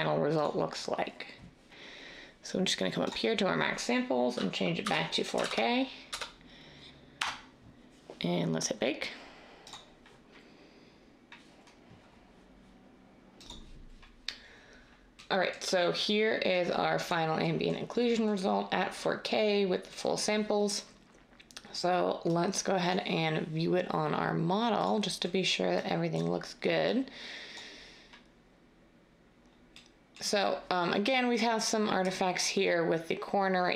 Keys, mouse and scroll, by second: 4.8-6.1 typing, 7.1 Return.